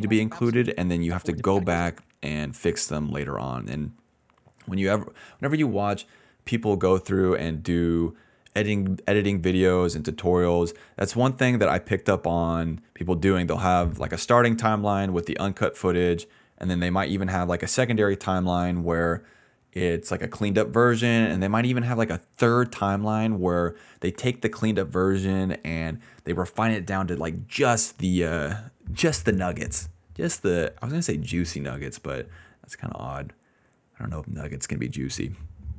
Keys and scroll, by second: 0.4 space, 0.9 space, 1.7 space, 12.9-14.4 typing.